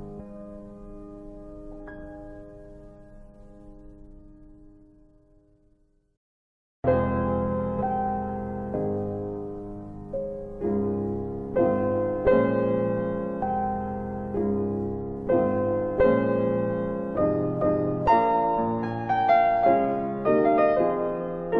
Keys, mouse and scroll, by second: 1.0 click, 20.9 alt+click.